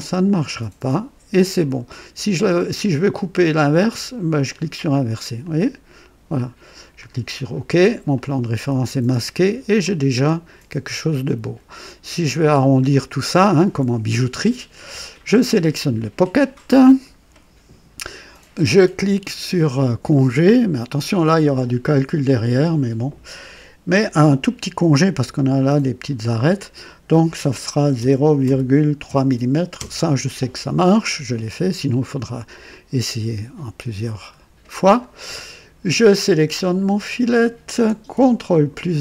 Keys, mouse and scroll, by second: 0.3 click, 1.6-2.9 drag, 4.3 click, 5.4 click, 6.9 click, 8.1-9.6 drag, 9.8-12.4 drag, 12.5 scroll up 2, 15.3 click, 16.7-17.3 right drag, 20.1 click, 27.9 KP_0, 28.4 ,, 29.0 KP_3, 29.7 KP_Enter, 32.7-35.2 drag, 35.4 typing, 37.0 click.